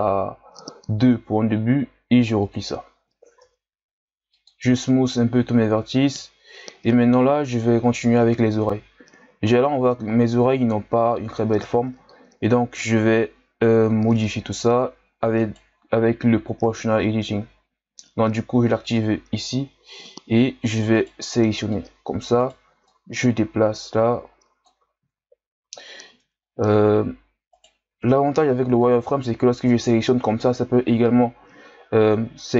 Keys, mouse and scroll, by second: 2.4-3.4 drag, 3.4 w, 5.7-7.4 ctrl+scroll up 4, 8.0-8.7 ctrl+scroll down 1, 8.7-9.9 scroll up 1, 9.9-12.7 scroll down 1, 12.9 Tab, 13.5-13.9 scroll up 2, 13.9 z, 14.2-15.3 scroll up 1, 15.3 right click, 18.8 click, 19.7-21.0 scroll up 1, 21.0 right click, 21.2 c, 22.8-25.0 drag, 25.0 ctrl+z, 25.7 z, 26.8 z, 27.5 right click, 27.8 c.